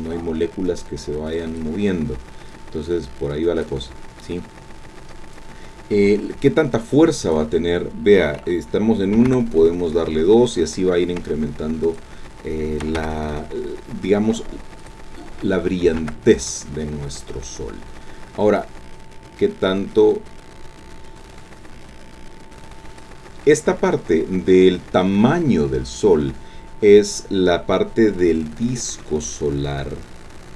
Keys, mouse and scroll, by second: 0.0-1.8 drag, 2.5-3.8 drag, 7.2 click, 9.1 KP_2, 9.3 KP_Enter, 11.9 click, 12.8 KP_3, 13.0 KP_Enter, 14.8 click, 15.9 KP_1, 16.0 KP_Enter, 18.6-23.2 drag, 28.1-28.6 scroll down 2, 28.9 scroll down 2, 29.0-30.5 drag.